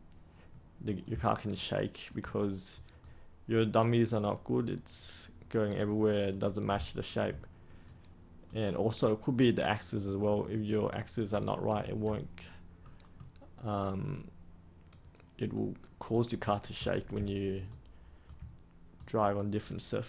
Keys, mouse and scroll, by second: 1.5 ctrl+right click, 2.7-3.9 right drag, 4.1-6.7 drag, 6.8 ctrl+right click, 7.8-9.0 right drag, 9.3-11.0 drag, 12.8-14.0 middle drag, 14.8-16.1 drag, 16.4-17.1 scroll up 1, 17.6 ctrl+right click, 18.9-20.0 right drag.